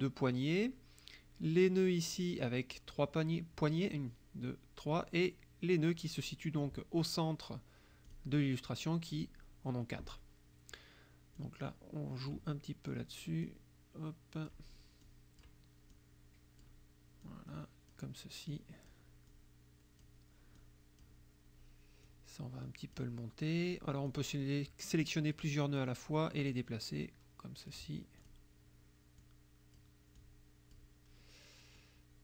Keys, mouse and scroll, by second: 2.2 click, 8.1 click, 11.4-12.5 drag, 13.5-14.7 drag, 15.1 click, 16.0 click, 17.3 click, 18.6 click, 19.3 click, 20.6 click, 22.1-23.2 drag, 24.1-25.6 drag, 26.4-27.9 drag, 28.3 click, 29.2 click, 30.2 click, 31.8 click.